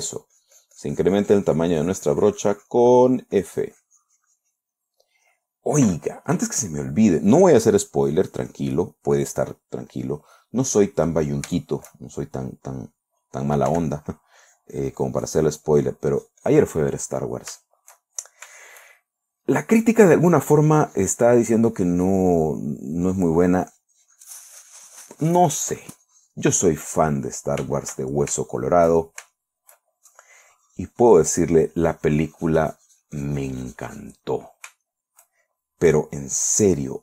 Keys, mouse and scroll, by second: 3.8-5.7 drag, 8.3-9.5 drag, 9.9 middle click, 12.0-12.9 shift+middle drag, 13.2 middle click, 14.1 f, 14.6 click, 14.9-16.5 drag, 16.6 click, 17.3-17.8 middle drag, 18.1-18.9 shift+middle drag, 19.0-19.9 shift+middle drag, 20.4-23.3 drag, 23.5-27.7 drag, 27.7-28.1 middle drag, 28.2-30.3 shift+middle drag, 30.5-34.7 shift+drag, 34.7-35.2 middle drag, 35.3-35.8 shift+middle drag, 35.9-37.0 shift+middle drag.